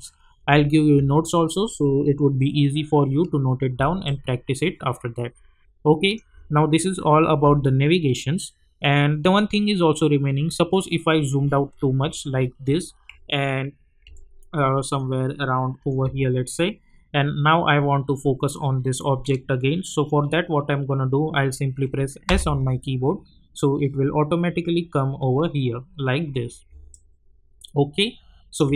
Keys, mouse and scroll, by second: 4.1-6.2 alt+drag, 6.0 click, 10.3-10.8 scroll down 1, 14.0 scroll down 1, 14.1-15.1 alt+middle drag, 22.2 s, 23.8-25.6 scroll down 1, 26.6 scroll down 1, 26.9-28.7 alt+drag.